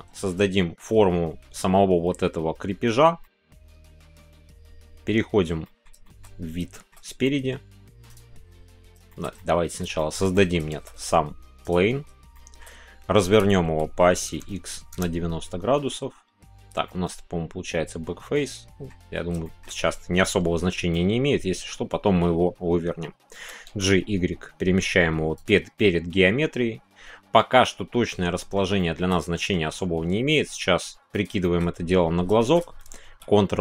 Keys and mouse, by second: 0.5 shift+middle click, 3.2 shift+middle click, 3.7 middle click, 4.1 shift+middle click, 5.6 middle click, 6.0 shift+middle click, 6.7 shift+middle click, 7.2 middle click, 8.0 click, 9.0 shift+middle click, 9.3 middle click, 9.9 shift+middle drag, 10.3 middle click, 12.3 shift+click, 13.2 r, 14.2 KP_9, 16.8-18.8 middle drag, 19.4-25.3 shift+middle drag, 25.3 click, 25.8-27.6 middle drag, 28.0 middle click, 28.7 shift+middle click, 29.2-29.5 middle drag, 29.9 s, 31.1 click, 31.4 shift+middle click, 32.4 shift+middle click, 33.0 ctrl+a.